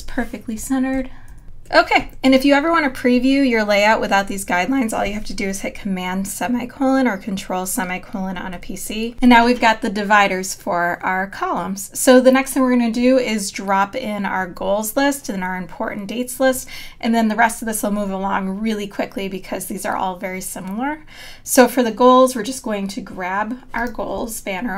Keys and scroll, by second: 0.6 Right, 1.3 Left, 1.4 super+-, 9.0 super+;.